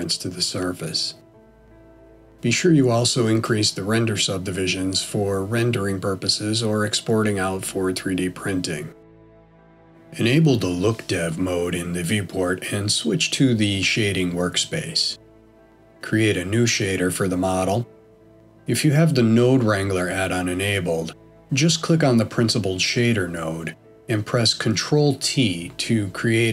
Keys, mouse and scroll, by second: 0.6-1.0 scroll up 1, 1.3 middle click, 6.0 ctrl+shift+middle click, 9.5 click.